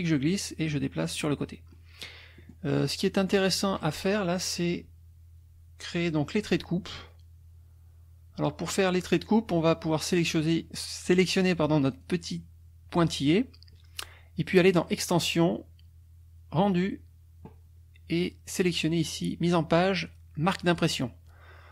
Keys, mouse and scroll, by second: 1.7 middle click, 2.4 middle click, 3.2 middle click, 9.1 click, 11.9 click, 14.7 click, 20.6 click.